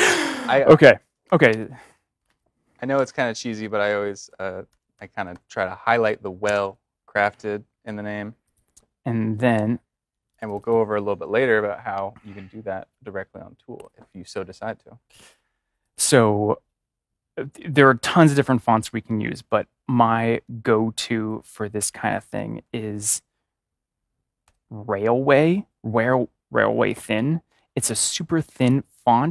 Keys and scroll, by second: 0.3 Right, 0.5 Right, 0.6 Right, 0.9-2.9 typing, 4.2-5.3 typing, 6.4 typing, 22.2 BackSpace, 24.3 typing.